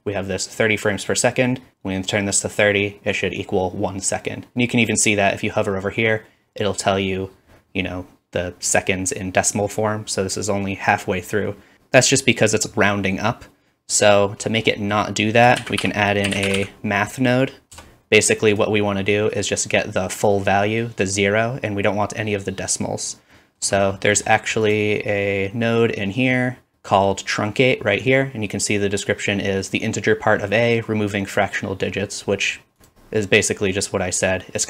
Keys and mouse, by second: 15.6 shift+a, 18.3-19.0 typing, 18.7-24.6 middle drag, 24.6-34.6 drag.